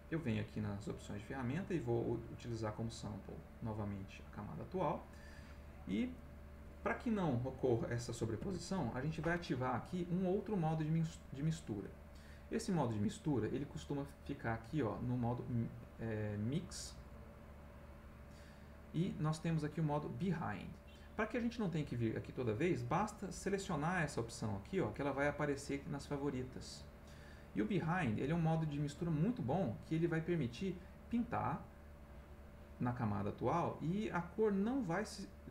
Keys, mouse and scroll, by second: 0.6 click, 2.3 click, 3.8 click, 6.1 click, 8.4 ctrl+z, 11.0 click, 16.3 click, 23.3 click, 24.6 click, 27.1 click, 30.0 click, 31.9 click.